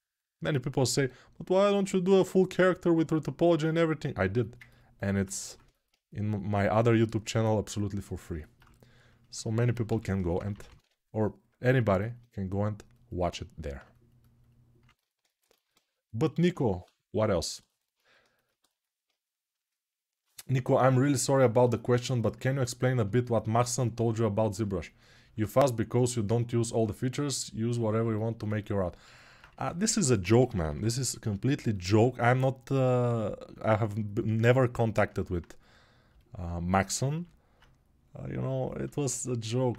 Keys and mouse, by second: 1.6-39.7 drag, 9.6 g, 16.3 1.